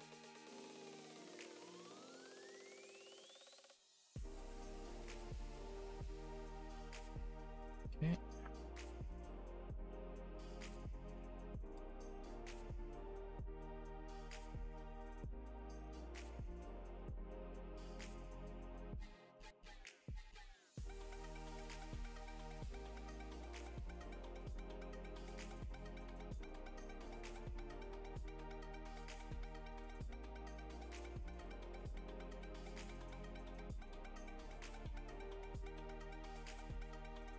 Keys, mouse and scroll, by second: 7.0 middle click, 8.8 click, 13.7 click, 14.6 click, 16.2 click, 19.3 click, 19.7 click, 20.1 click, 20.9 click, 27.2 click, 28.8 click, 30.9 click, 33.6 click, 34.9 click.